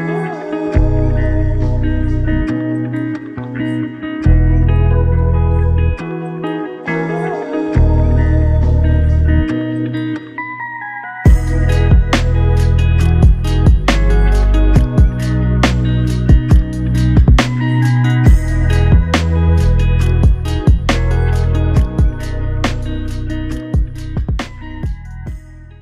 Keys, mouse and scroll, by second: 1.0 alt+click, 10.0 alt+click, 14.3 double click, 25.0 alt+click.